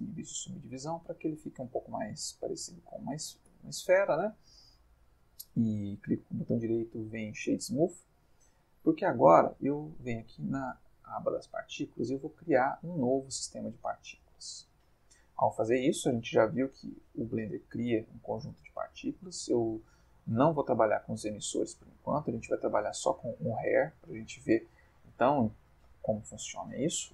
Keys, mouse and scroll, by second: 3.5 Tab, 4.0-5.1 middle drag, 5.7 right click, 6.5 click, 7.1-8.0 middle drag, 10.8 click, 12.6 click, 15.8 space, 18.4 space, 23.0 click, 24.2-27.1 middle drag.